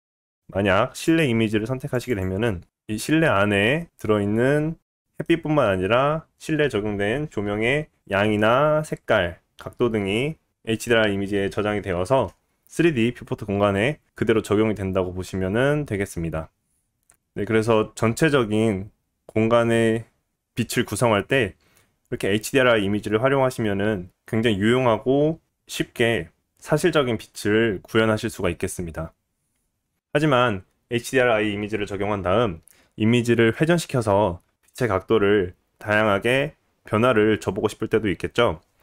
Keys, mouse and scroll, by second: 4.2 middle click, 4.6 middle click, 4.8-30.1 middle drag.